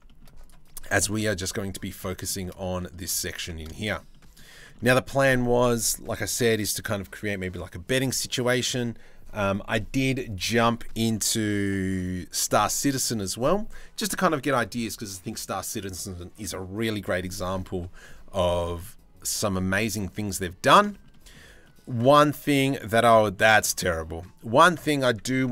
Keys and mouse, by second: 0.8 KP_Decimal, 1.7 shift+middle click, 2.4 middle click, 3.0 Tab, 3.2 middle click, 3.4 shift+middle click, 3.7 middle click, 4.4 middle click, 20.0 middle click, 20.5 shift+middle click, 20.7 middle click, 21.2-22.7 middle drag, 23.0 middle click, 23.5 middle click, 24.3 middle click.